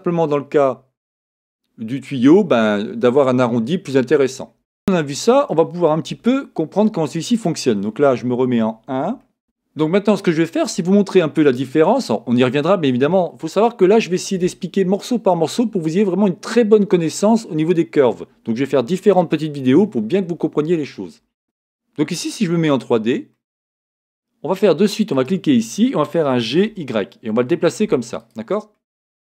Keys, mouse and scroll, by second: 4.6 scroll up 2, 6.1 KP_1, 7.0-7.9 scroll down 2, 9.2-22.7 shift+middle drag, 9.4 KP_1, 22.7 click, 23.3-25.1 middle drag, 25.1 click, 26.4 g, 28.3 click, 28.7-29.3 middle drag.